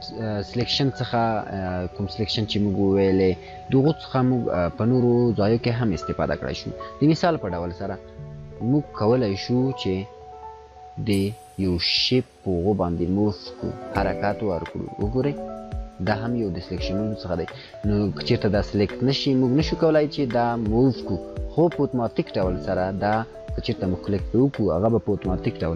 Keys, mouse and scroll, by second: 4.6 ctrl+z, 9.6 click, 9.8-11.2 alt+click, 11.4 scroll down 1, 12.9-14.1 click, 14.2 scroll up 1, 14.7-15.4 drag.